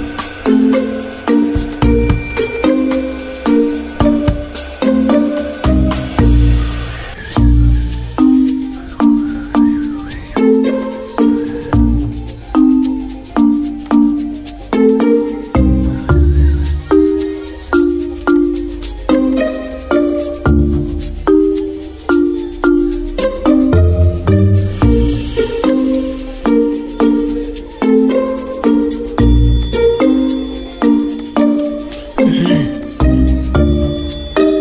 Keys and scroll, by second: 5.5 ctrl+3, 6.0 z, 7.2 v, 21.9 z, 23.7 g, 34.2 z.